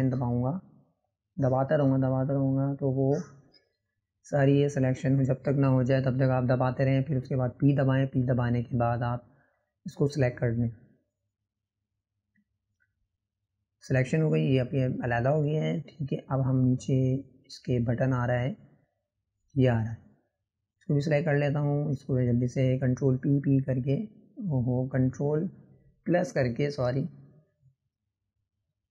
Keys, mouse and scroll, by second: 1.0-6.3 ctrl+KP_Add, 6.9-8.8 middle drag, 9.6-9.9 scroll up 1, 9.9-11.8 middle drag, 12.1 scroll down 1, 13.4 p, 14.9 drag, 15.1 scroll down 1, 15.4-19.2 shift+middle drag, 19.2 scroll up 5, 19.9 click, 20.9 click, 22.4-24.7 ctrl+KP_Add, 26.1-26.5 scroll up 2, 26.5-28.9 middle drag.